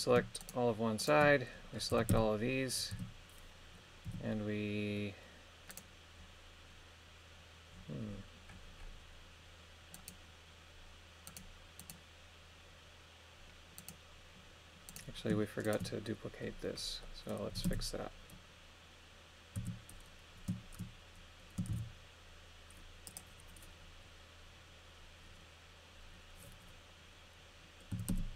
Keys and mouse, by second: 0.4 shift+right click, 1.0 shift+right click, 1.9 a, 2.1 a, 2.9 a, 4.1 g, 9.9 right click, 11.3 right click, 11.8 right click, 13.8 right click, 14.9 right click, 15.6 shift+right click, 17.2 middle click, 17.5 a, 17.7 a, 19.6 a, 21.7 shift+d, 23.1 click, 27.9 a, 28.1 a.